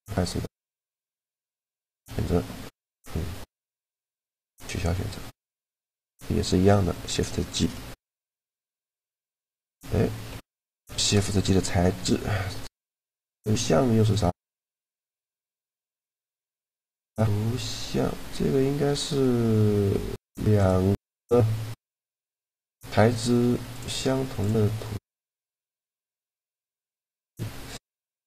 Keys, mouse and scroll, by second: 1.5-3.4 drag, 4.4-6.1 drag, 6.2 middle click, 6.9 Tab, 7.7 shift+g, 10.1 Tab, 10.6 shift+g, 18.5 middle click, 20.3-26.2 drag, 28.1 click.